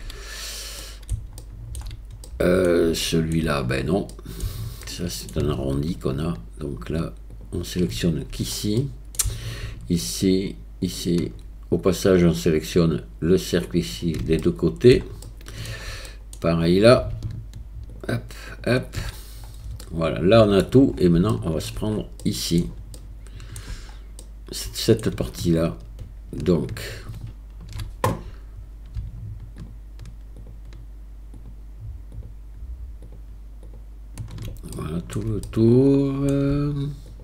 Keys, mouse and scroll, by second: 0.8 middle click, 1.4 shift+middle click, 2.3 middle click, 3.0 shift+middle click, 4.1 middle click, 4.8 shift+click, 6.3 alt+shift+click, 8.8 middle click, 10.0 alt+shift+click, 10.8 alt+shift+click, 12.9 alt+shift+click, 13.7 alt+shift+click, 14.4 middle click, 15.2 shift+middle click, 16.1 middle click, 18.5 alt+shift+click, 19.8 middle click, 21.3 shift+middle click, 22.2 middle click, 23.0 shift+middle click, 24.2 middle click, 30.4 alt+shift+click, 31.4 alt+shift+click, 32.2-33.8 alt+shift+drag, 34.8 shift+middle click, 35.5 middle click, 37.1 alt+shift+click.